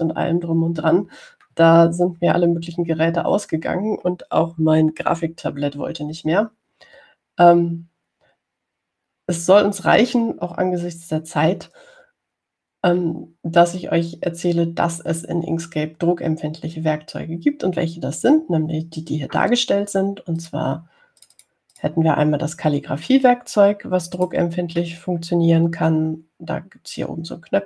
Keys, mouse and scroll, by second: 21.6 click, 22.4 click, 23.0 click, 25.4 click.